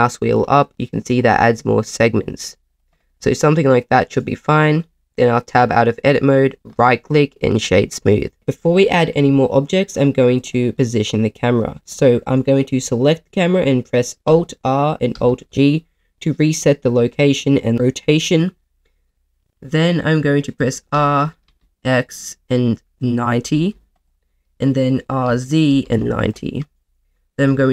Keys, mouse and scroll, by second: 0.4-1.2 scroll up 2, 1.2-2.7 scroll up 3, 2.7 click, 3.1 middle click, 5.5 Tab, 7.6 Tab, 7.6 right click, 10.4 click, 10.7 middle click, 14.3 alt+r, 15.1 alt+g, 19.0 middle click, 20.6 r, 21.4 x, 23.5 9, 23.6 0, 23.9 click, 24.2 middle click, 25.1 r, 25.2 z, 25.8 9, 25.8 0, 26.2 click, 27.3 g, 27.4 z.